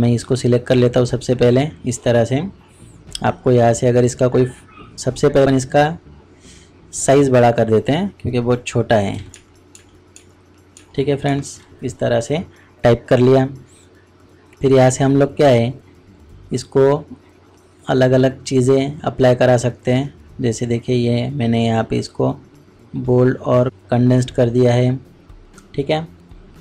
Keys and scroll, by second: 9.1 typing, 9.3 shift+Up.